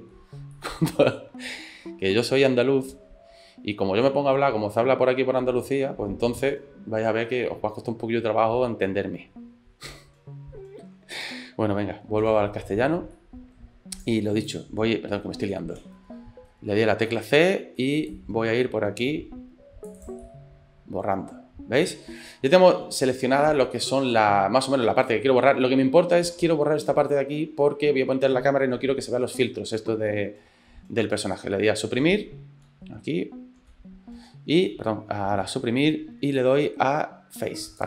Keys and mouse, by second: 0.6-1.9 middle drag, 9.9 c, 12.2 c, 15.5 ctrl+z, 15.8 ctrl+z, 17.0 c, 20.2-26.0 middle drag, 27.0-28.5 middle drag, 33.6 Delete, 36.2 Delete.